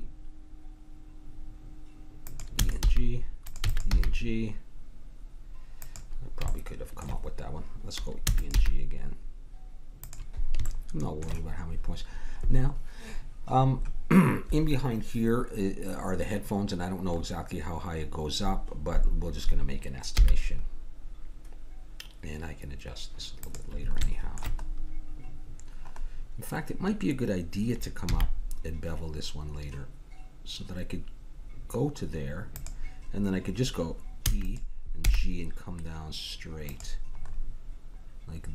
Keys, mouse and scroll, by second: 2.6 e, 2.8 g, 3.6 e, 3.9 g, 6.7 middle click, 8.2 e, 8.6 g, 10.6 click, 10.8 middle click, 11.0 click, 20.1 g, 23.6 g, 24.6 middle click, 26.0-28.1 middle drag, 28.1 g, 34.2 e, 35.0 g, 38.4 g.